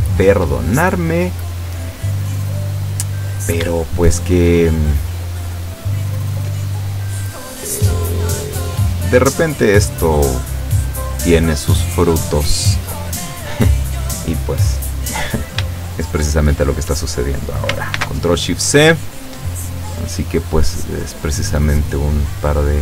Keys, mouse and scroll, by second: 1.0-3.0 middle drag, 3.1-3.5 scroll up 1, 3.8 shift+middle click, 5.2 right click, 6.3 click, 7.3 click, 8.9 right click, 10.1 click, 10.9 click, 11.3 click, 12.5 right click, 16.3 shift+right click, 18.0 ctrl+shift+c, 18.7 click, 20.0 click, 20.6 click, 21.2 click, 22.2 click, 22.6 click.